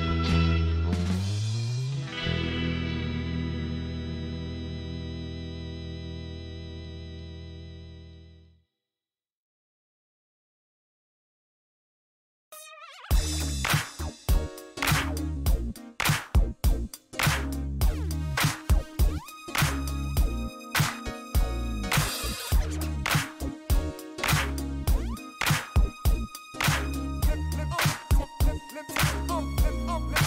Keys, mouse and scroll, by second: 0.2 click, 1.6 click, 2.8 click, 3.2 right click, 4.5 click, 5.7 click, 6.5 click, 7.4 click, 8.7 click, 9.9 KP_1, 10.3 ,, 10.5 KP_5, 11.1 KP_Enter, 12.6-13.9 drag, 14.6 click, 16.7 click, 19.5 middle click, 21.5 click, 22.9 KP_3, 23.1 ,, 23.4 KP_5, 23.9 KP_Enter, 25.0-26.5 drag, 26.6 scroll down 1, 26.8-28.0 middle drag, 28.9 middle click, 30.1 click.